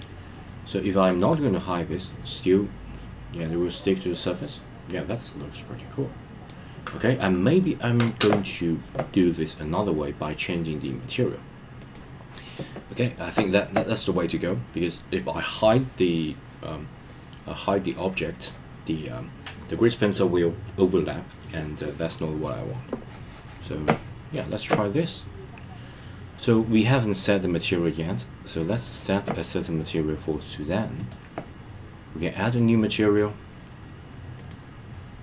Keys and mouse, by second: 1.7-6.5 middle drag, 28.7 click, 32.5-35.2 drag.